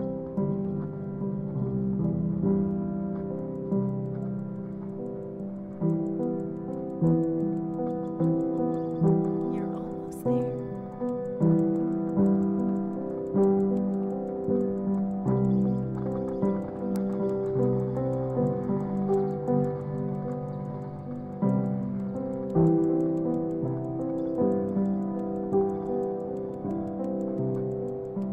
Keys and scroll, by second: 9.6 super+-, 13.6 super+-.